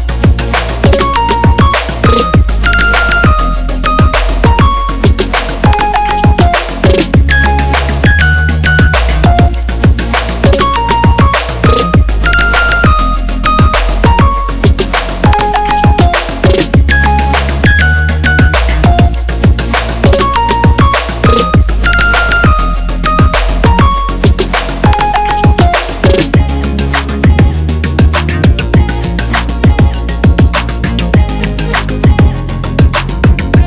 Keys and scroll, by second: 4.3 x, 4.6 ctrl+z, 9.4 ctrl+z, 11.3 KP_8, 11.3 Return, 11.7 KP_9, 11.8 Return, 13.4 KP_5, 13.6 Return, 14.1 KP_1, 14.2 Return, 21.9-22.8 typing, 30.8-32.2 typing, 31.4 Left.